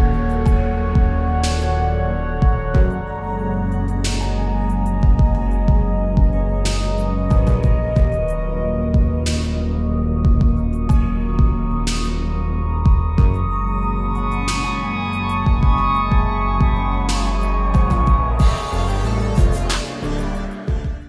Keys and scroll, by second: 3.9 ctrl+z, 5.2 ctrl+-, 5.5 space, 6.5 space, 9.4 ctrl+z, 10.7 ctrl+-, 12.1 ctrl+0, 13.7 ctrl+z, 14.7 ctrl+z.